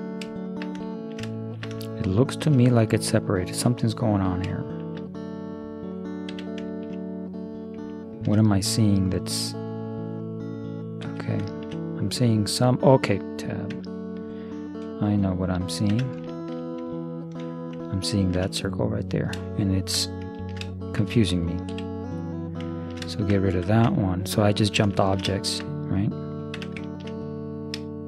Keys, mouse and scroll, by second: 6.3 z, 9.2 right click, 9.8-11.5 right drag, 11.6-13.6 middle drag, 13.7 Tab, 15.1-16.8 right drag, 16.1 Tab, 16.3 click, 17.1 click, 17.1 right click, 19.5-22.5 middle drag, 22.1 x, 22.8-24.5 middle drag, 23.9 Tab, 24.5-26.4 drag, 26.6 Tab.